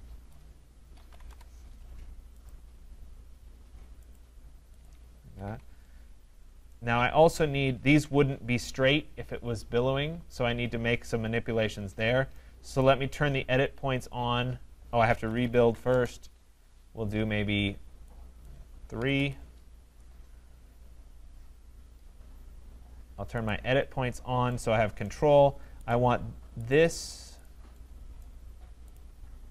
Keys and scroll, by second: 1.3 Return, 5.2 Escape, 15.9 Return.